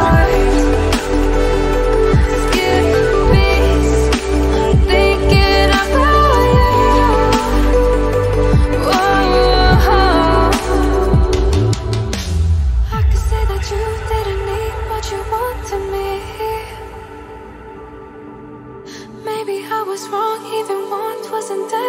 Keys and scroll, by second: 8.0 Up, 8.3 Up, 8.8 Up, 9.1-12.9 Up, 13.1 Up, 13.3 Up, 13.6 Up, 13.8 Up, 14.0 Up, 14.0 Up, 14.2 Up, 14.8 ctrl+t.